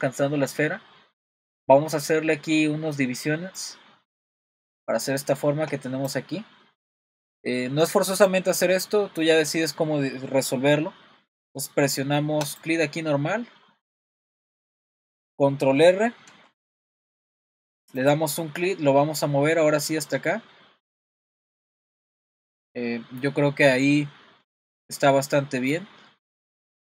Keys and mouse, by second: 12.5 click, 14.5 click, 16.3 super+r.